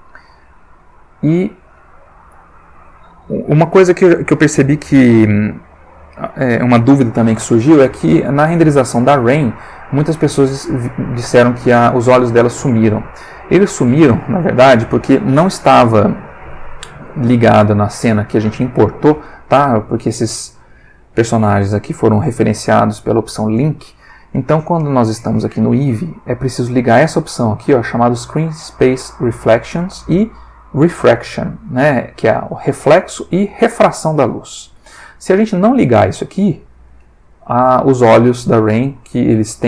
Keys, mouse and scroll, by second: 12.3 click, 26.9 click, 27.7 click, 29.6 click, 36.6 click.